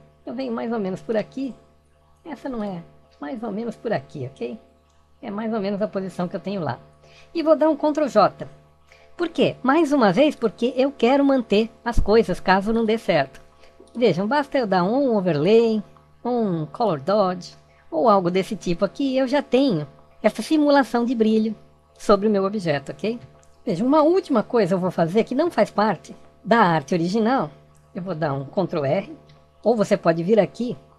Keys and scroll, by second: 8.6 ctrl+j, 25.0 alt+=, 28.2 ctrl+r.